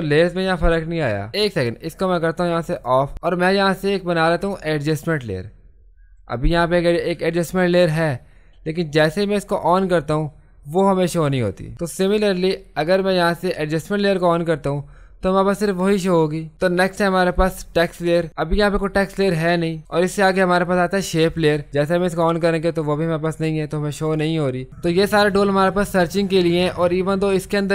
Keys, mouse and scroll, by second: 2.8 click, 3.7 click, 9.6 click, 12.1 click, 17.8 click, 21.7 click, 23.8 typing, 26.5-27.2 typing, 26.7 click.